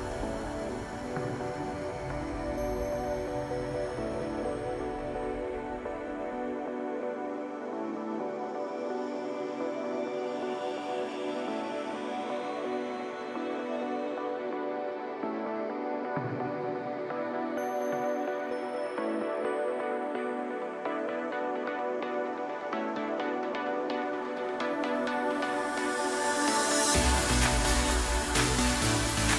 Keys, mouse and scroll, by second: 0.9 e, 4.3 g, 10.1 KP_1, 11.5 ctrl+KP_8, 11.6 ctrl+KP_8, 11.9 ctrl+KP_8, 12.0 ctrl+KP_8, 13.5 e, 19.2 g, 20.9 s, 23.5-24.0 scroll up 1, 24.3 e, 25.4 s, 28.5 e.